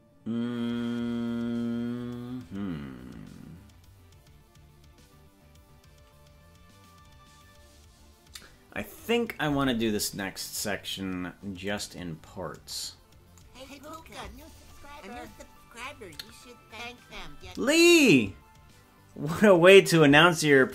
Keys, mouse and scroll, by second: 11.9 right click, 14.2 right click.